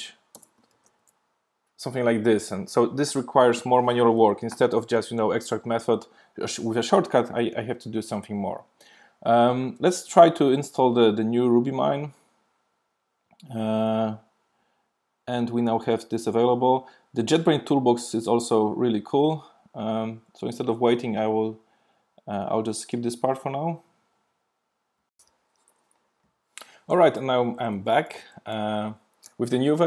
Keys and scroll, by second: 1.0 super+v, 5.6 alt+super+m.